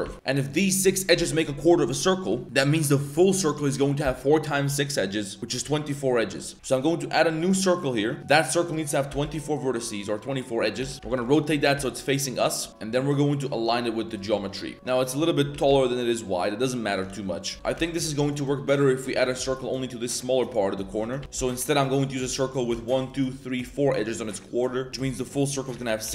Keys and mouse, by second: 0.0 1, 2.2 1, 5.4 z, 5.4 a, 6.4 z, 6.5 shift+a, 8.6 click, 10.8 r, 11.7 s, 12.7 s, 14.4 shift+click, 15.5 s, 17.1 z, 17.5 z, 17.5 2, 17.7 a, 18.0 click, 18.3 shift+click, 19.4 z, 21.2 typing, 22.6 click, 22.9 shift+click, 23.3 shift+click, 23.6 shift+click, 24.9 shift+a, 25.3 click.